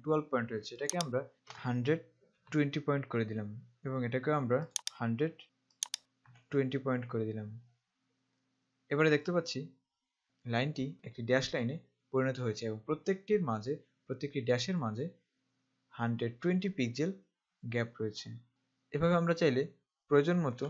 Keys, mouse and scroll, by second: 1.1 click, 2.7 0, 5.0 click, 5.9 click, 6.4 0.